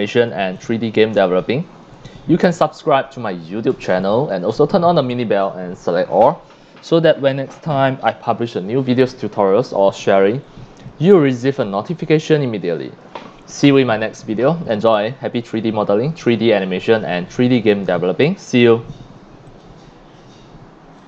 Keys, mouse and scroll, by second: 0.3 q, 0.6 click, 1.8 c, 2.0-2.7 drag, 3.8 c, 4.0-4.5 drag, 9.6 scroll down 1, 10.3 c, 10.4-10.9 drag, 11.2 c, 11.4 click, 16.1 c, 16.2-17.6 drag, 19.5 click, 21.0 click.